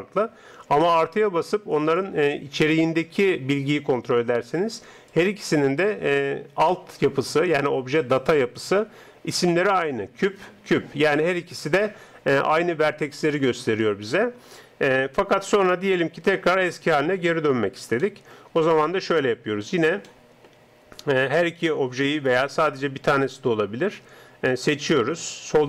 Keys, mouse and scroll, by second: 14.4-16.3 middle drag, 16.3 Tab, 18.1 middle click, 20.2-22.2 middle drag, 21.1-25.1 right drag.